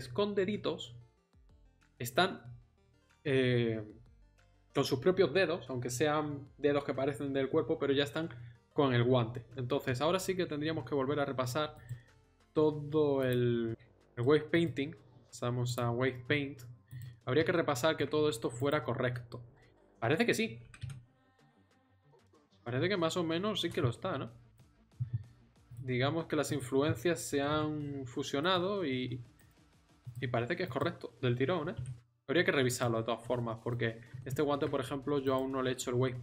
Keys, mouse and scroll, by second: 9.9 middle click, 10.2 Tab, 10.7 Tab, 16.9-20.6 right drag, 20.6 r, 25.7-27.3 right drag, 27.3 r, 29.4 right click, 29.5 r, 30.9 click, 31.6 r.